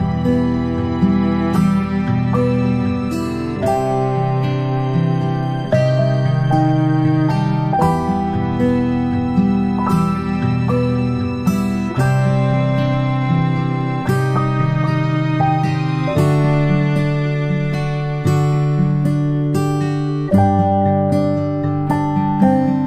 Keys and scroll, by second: 12.7 ctrl+shift+c, 12.8 ctrl+v, 13.8 ctrl+shift+[, 14.1 ctrl+shift+].